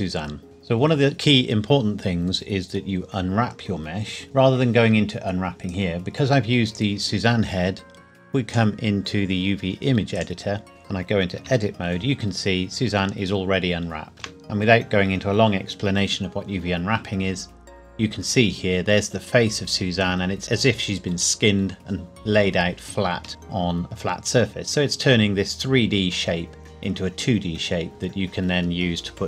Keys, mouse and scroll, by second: 5.7 click, 11.4 Tab, 12.4-13.6 scroll up 1, 13.6 scroll down 1, 14.1 shift+middle click, 14.5-15.0 scroll up 1, 17.7-18.1 scroll up 1, 18.1-20.1 scroll down 1, 23.3 middle click, 23.8-24.3 scroll down 1, 24.3-25.2 scroll up 1, 26.8-27.3 scroll down 1, 27.3 scroll up 1, 27.9-29.0 scroll down 1.